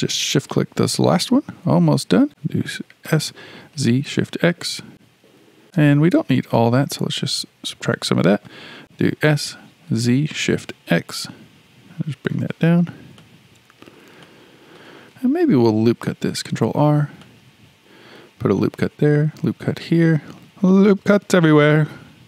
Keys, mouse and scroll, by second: 0.4 click, 2.3 shift+middle click, 3.0 s, 5.3 click, 5.5 ctrl+z, 7.0 ctrl+KP_Subtract, 7.9 shift+middle click, 8.8 s, 9.1 s, 13.7-14.2 scroll up 2, 14.2-16.2 shift+middle drag, 16.2 ctrl+r, 19.2 ctrl+r.